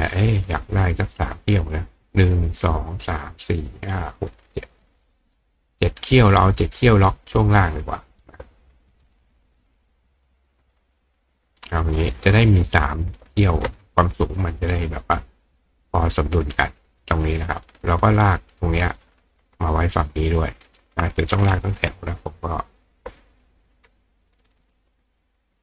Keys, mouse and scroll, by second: 6.6 click, 7.5-8.4 drag, 9.6-11.7 drag, 14.2 click, 15.4 click, 19.0-20.8 drag, 20.6-22.6 ctrl+right drag, 22.2-22.9 drag.